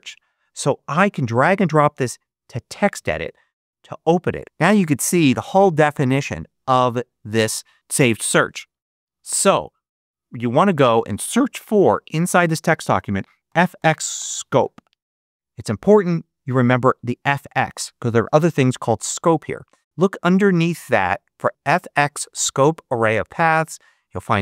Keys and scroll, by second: 11.6 super+f, 13.1-15.0 typing.